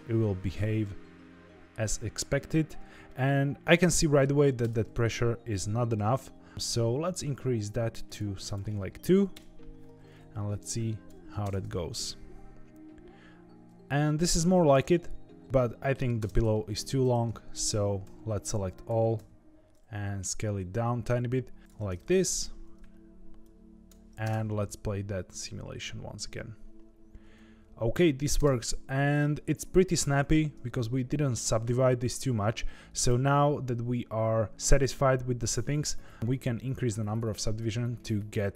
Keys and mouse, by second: 3.1-4.2 middle drag, 4.6 space, 5.9-6.5 middle drag, 8.0 click, 8.5-9.7 drag, 10.6 click, 11.4 space, 14.8-16.1 middle drag, 16.1 space, 16.5 middle drag, 17.0 Tab, 18.0 a, 18.8 s, 21.7 Tab, 21.9-22.4 middle drag, 23.4 click, 24.2 space, 28.3 space, 32.1-33.2 drag.